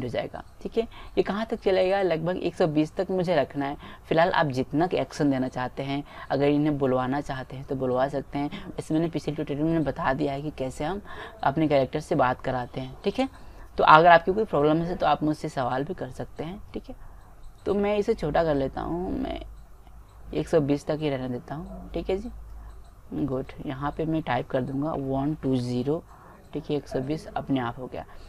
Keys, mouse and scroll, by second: 3.0-4.8 drag, 7.3-8.5 middle drag, 9.0-11.2 drag, 17.0 click, 23.5-25.1 drag.